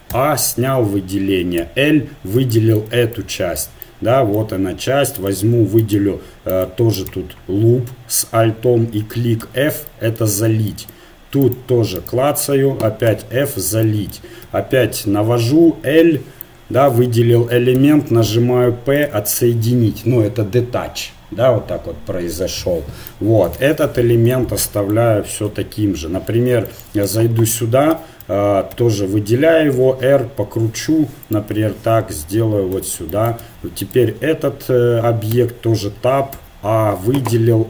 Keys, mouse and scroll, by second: 0.1 a, 1.6 l, 3.3-4.9 drag, 5.2-8.8 right drag, 9.4 f, 11.5 right click, 11.9-13.9 drag, 13.1 f, 14.4 a, 15.5 l, 17.8 p, 23.7 Tab, 25.5 KP_1, 27.1 Tab, 27.9 s, 28.0 a, 28.3 a, 28.7 a, 29.8 r, 31.6 g, 33.5 Tab, 33.8-35.3 right drag, 35.5 Tab, 36.3 a, 37.3 r.